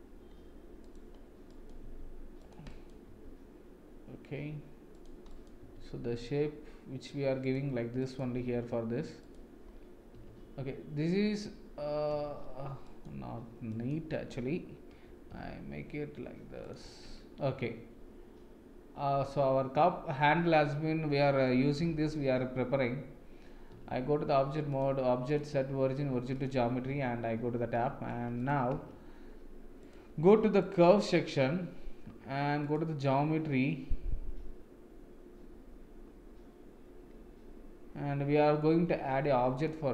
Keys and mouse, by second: 1.4 click, 1.8 g, 2.8 click, 3.0 g, 5.4 click, 5.6 g, 8.0 click, 8.3 g, 10.1 Tab, 12.1 Tab, 12.8 click, 13.7 click, 15.3 g, 16.8 Tab, 19.3-21.4 middle drag, 21.7 Tab, 23.7 Tab, 24.7-26.4 drag, 26.8 Tab, 27.7 middle click, 28.7 Tab, 29.8 click, 30.6 click, 39.6 click.